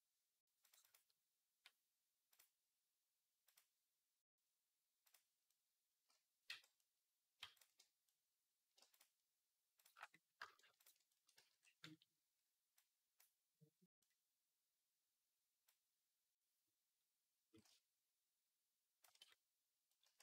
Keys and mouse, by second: 0.5 middle click, 0.6 click, 0.7-2.2 middle drag, 2.2-5.0 drag, 5.0-7.4 middle drag, 6.3 z, 7.4 alt+shift+click, 7.6-8.7 middle drag, 8.7 alt+shift+click, 8.8 middle click, 9.6 alt+shift+click, 9.8 middle click, 11.2 z, 11.4-13.7 middle drag, 12.6-13.7 drag, 20.0 Tab.